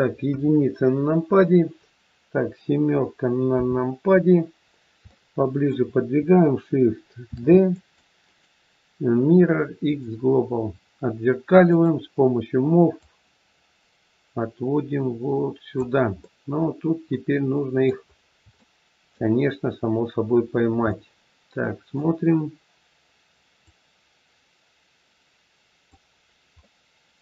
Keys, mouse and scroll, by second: 0.1 KP_1, 3.4 KP_7, 5.0 shift+middle click, 7.3 shift+d, 8.3 right click, 11.6 click, 13.0 click, 16.3 middle click, 18.0 scroll up 3, 18.6 shift+middle click, 19.3-19.6 scroll up 2, 20.4-20.7 scroll down 2, 20.9 middle click, 23.6 click, 26.6 middle click.